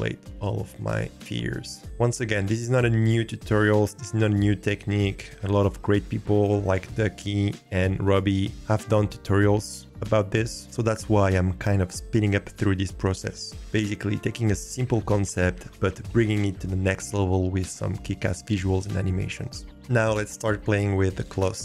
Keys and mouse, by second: 0.0 s, 0.6-1.6 drag, 4.3-5.4 drag.